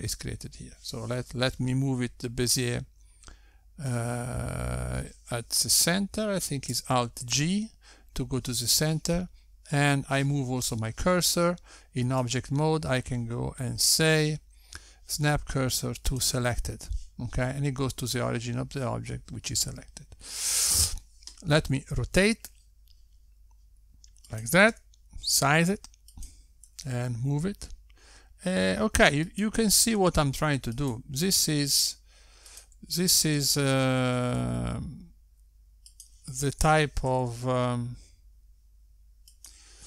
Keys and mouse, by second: 8.7 alt+g, 14.0 right click, 23.7 r, 26.8 s, 28.7 g, 32.1 r, 33.7 s, 34.8 s, 38.7 s.